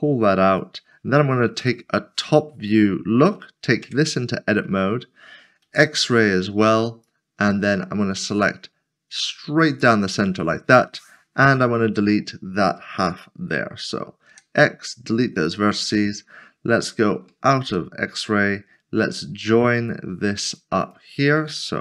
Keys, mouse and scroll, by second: 0.5 click, 1.7 typing, 2.7 shift+middle click, 3.8 Tab, 4.6 scroll, 4.8 scroll up 1, 5.7 z, 7.0 z, 11.4 click, 11.7 middle click, 14.3 x, 15.4 x, 17.6 z, 19.7 z, 19.9 click, 20.2 s, 20.8 shift+click.